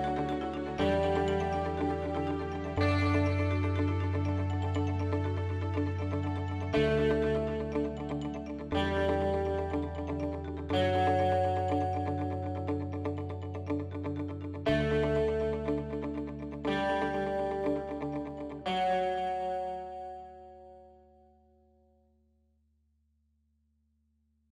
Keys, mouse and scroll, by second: 7.4 KP_3, 9.0 click, 11.2 Tab, 13.3 Tab.